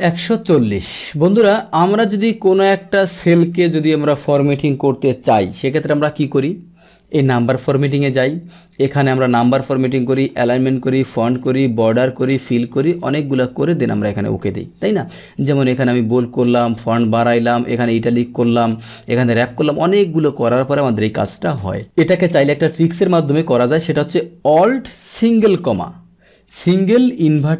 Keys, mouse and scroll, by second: 2.1 click, 7.7 click, 9.3 click, 10.2 click, 11.0 click, 11.8 click, 12.3 click, 12.8 click, 13.8 click, 15.8 click, 16.6 click, 17.7 click, 20.2 click, 21.1 click.